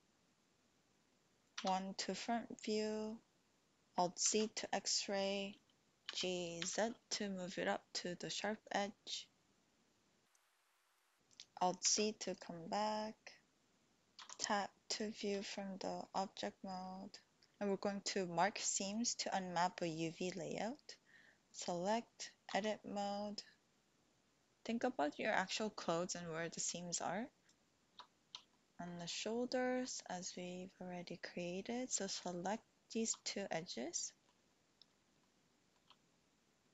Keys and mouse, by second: 1.5 KP_1, 4.1 alt+z, 6.1 g, 6.6 z, 8.7 click, 10.8 click, 11.8 alt+z, 12.3 click, 12.6-13.8 drag, 14.2 Tab, 15.4 shift+click, 17.0 shift+click, 21.4 click, 22.5 Tab, 28.5 shift+click, 29.5 click, 32.2 alt+shift+click, 34.0 click, 35.3 shift+click.